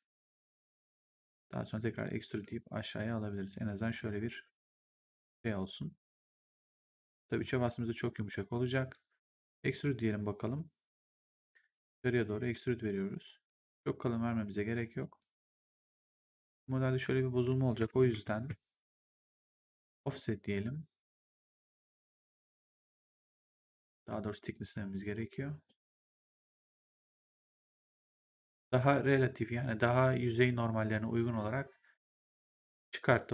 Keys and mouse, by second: 1.7 click, 2.2 w, 2.9 click, 6.7 right click, 7.1 3, 8.0 1, 9.5 click, 10.9 click, 18.0 ctrl+z, 20.0 click, 24.0 z, 24.4 click.